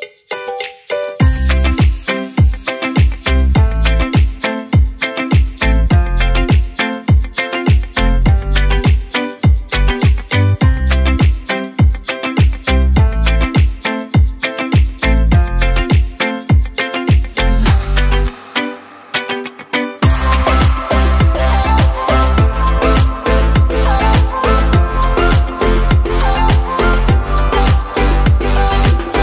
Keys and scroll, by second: 4.4 Delete, 9.2 ctrl+z, 22.0 Down, 22.3-22.9 Down, 23.1 Down, 23.4 Down, 23.7 Down, 23.9 Down, 24.1 typing, 26.5 typing, 28.5 Down, 28.7 Down, 29.0 Down.